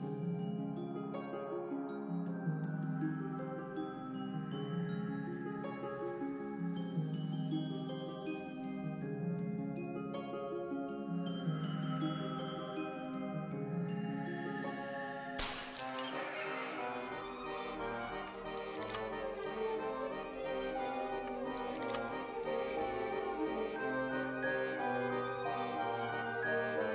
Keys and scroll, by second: 9.1 space, 17.2 x, 19.5 Delete, 24.1-25.3 typing, 25.7 Return.